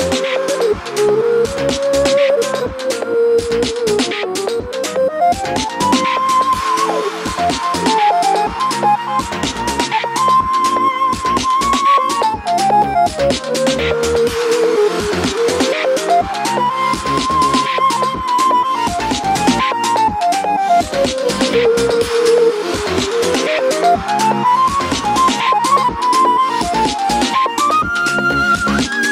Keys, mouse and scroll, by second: 3.3 KP_7, 4.7-9.3 middle drag, 9.3 click, 12.2 click, 14.2 middle click, 14.2 3, 14.4 click, 14.7 click, 15.0 click, 15.3 z, 17.2 e, 18.5 Tab, 18.5-27.4 middle drag, 19.9 scroll down 1, 21.6 ctrl+s, 24.3-24.8 scroll down 2, 24.8 shift+d, 27.4 click.